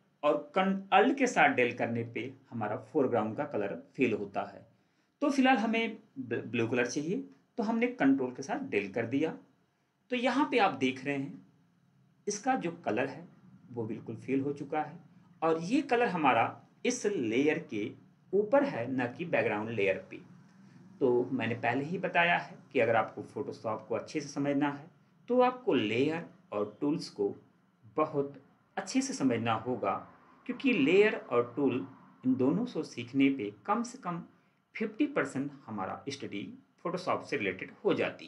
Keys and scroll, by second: 1.9 alt+Delete, 8.1 ctrl+Delete.